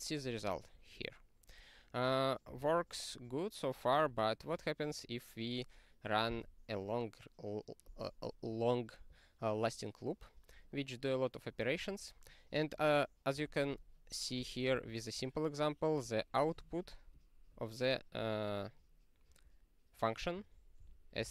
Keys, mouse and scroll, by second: 0.2 click, 2.5 q, 4.0 click, 14.7 ctrl+e, 17.1 click, 17.8 click, 20.8 ctrl+g, 21.1 ctrl+space, 21.2 ctrl+n.